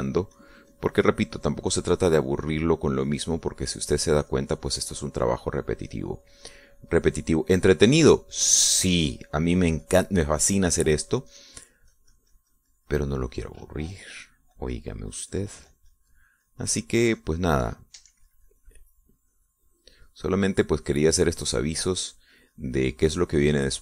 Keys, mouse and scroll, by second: 0.8-5.6 drag, 5.8-23.8 drag.